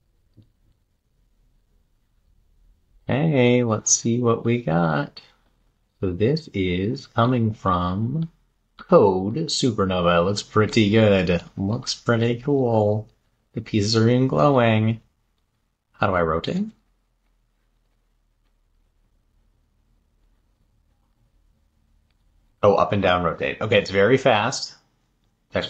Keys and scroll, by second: 12.2 Left, 13.2 Down, 14.2 Down, 19.1 Up, 21.0 Down, 25.4 Down.